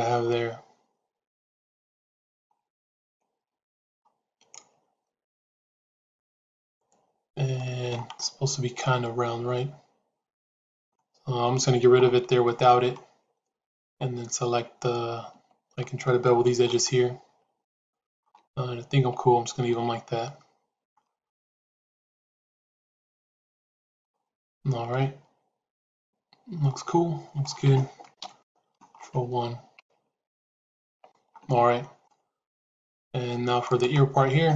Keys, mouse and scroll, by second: 0.2-7.2 middle drag, 7.5 middle click, 8.9-10.7 middle drag, 12.4 middle click, 15.2 Tab, 16.6 alt+click, 17.5 alt+click, 18.8 Tab, 19.6-20.8 middle drag, 21.4-27.3 middle drag, 28.1 ctrl+KP_1, 29.7 Tab, 32.0-33.0 middle drag, 33.6 click.